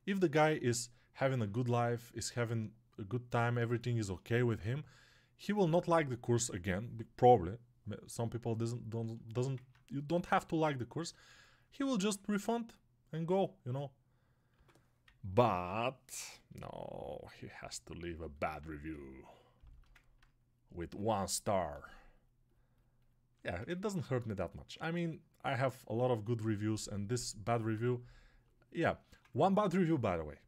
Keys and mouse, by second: 17.9-19.8 alt+right drag, 19.8-30.4 ctrl+alt+drag.